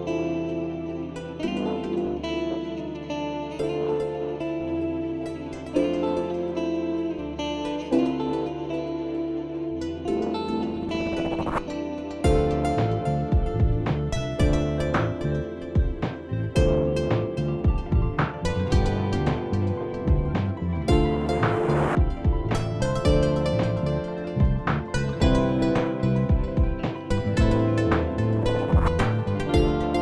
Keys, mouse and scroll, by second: 1.5 click, 1.8 click, 2.7 click, 2.8 click, 3.1 click, 4.0 click, 4.7 click, 5.3 click, 6.1 click, 6.7 click, 7.0 click, 7.8 click, 8.5 click, 8.6 click, 10.6 click, 10.7 click, 11.0 click, 11.2 click, 11.5 click, 11.8 click, 12.9 click, 13.4 alt+scroll down 1, 16.3 click, 17.6 click, 19.0 click, 23.5 click, 24.4 click, 24.7-25.3 scroll down 4, 25.3-26.5 scroll up 1, 27.9 click, 28.3 right click, 29.4 click.